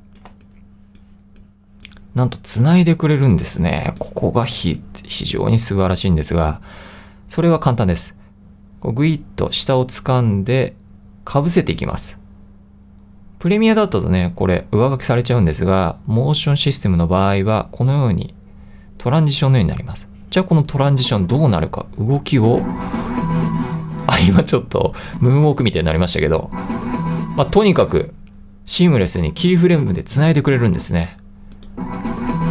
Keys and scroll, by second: 0.4 2, 4.6 i.